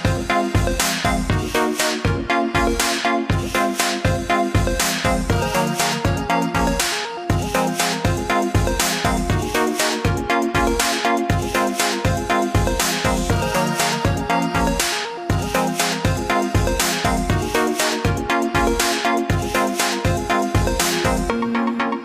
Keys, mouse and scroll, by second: 1.2 click, 2.7 alt+click, 6.9 click, 15.0 click, 16.7 alt+click.